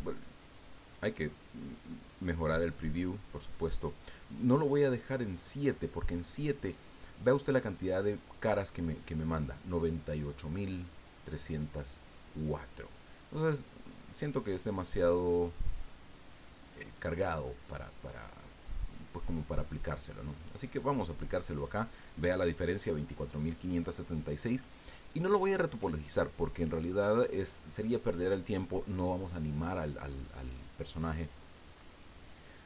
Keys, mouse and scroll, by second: 0.4 click, 0.9 click, 1.5 click, 2.4 click, 5.2 click, 14.6 click, 16.0 click, 16.6 click, 20.6 click.